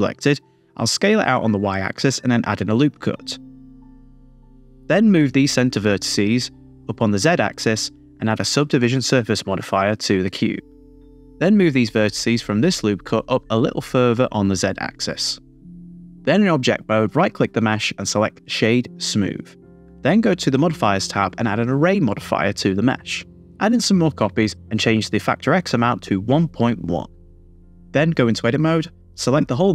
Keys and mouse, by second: 1.5 click, 2.2 Tab, 3.1 Tab, 3.2 super+r, 4.3 click, 5.2 g, 5.6 z, 5.9 z, 8.0 click, 8.6 Tab, 9.4-10.9 drag, 11.4 click, 11.7 Tab, 12.1 g, 12.2 z, 12.3 z, 13.5 click, 14.4 click, 15.2 g, 15.3 z, 16.1 click, 17.1 Tab, 18.3-19.5 drag, 20.2 click, 21.0 middle click, 22.1 click, 23.5 click, 25.0 click, 26.2 click, 26.7 Tab, 27.2 a, 27.4 r, 28.2 z, 28.4 z.